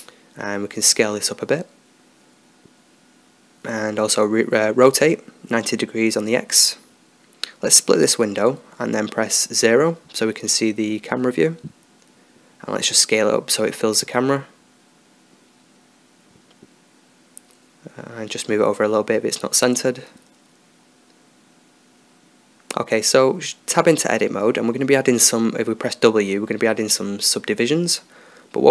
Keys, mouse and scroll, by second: 1.1-3.8 middle drag, 3.8 s, 5.7 r, 9.4-11.4 drag, 11.4 KP_0, 15.5 s, 19.6-21.1 drag, 21.1-22.9 middle drag, 23.6 Tab, 25.7 w, 27.8 t.